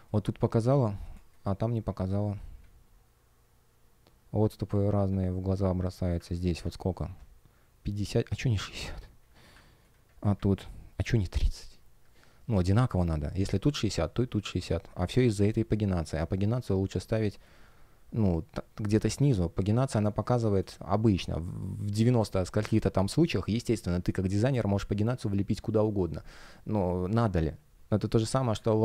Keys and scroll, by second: 1.0 space, 4.8 F1, 19.9 space, 28.0 space.